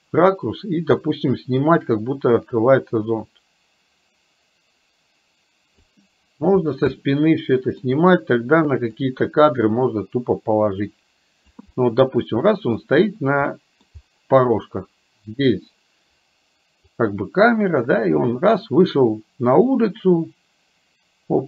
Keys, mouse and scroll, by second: 1.6-5.9 drag, 7.0 middle click, 9.1-11.6 drag, 11.7-12.9 middle drag, 13.6 middle click, 17.0-21.4 drag.